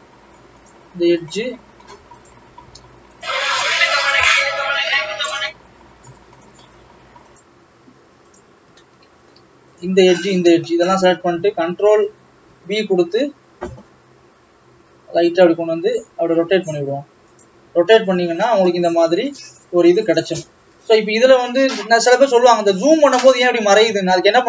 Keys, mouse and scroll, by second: 0.7 click, 2.3 click, 3.3 shift+click, 8.8-9.8 middle drag, 9.8 shift+click, 10.4 shift+click, 11.0-12.6 middle drag, 12.6 ctrl+b, 18.4 alt+a, 18.8-20.1 middle drag, 20.1-20.5 scroll up 2, 20.5 scroll down 2, 22.2-22.5 scroll down 2, 22.5-23.0 scroll up 6, 23.2 scroll down 1, 23.4 scroll up 1, 23.7-24.4 scroll down 3.